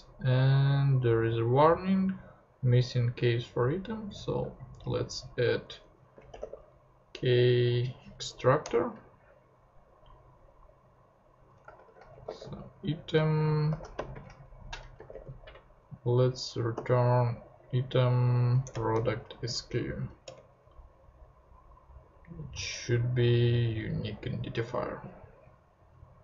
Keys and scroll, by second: 5.7 Return, 5.9-6.9 typing, 8.2 Down, 8.6 Return, 11.5-15.7 typing, 12.9 Right, 16.7 ., 18.6 Return, 18.7-19.9 typing, 20.2 Return.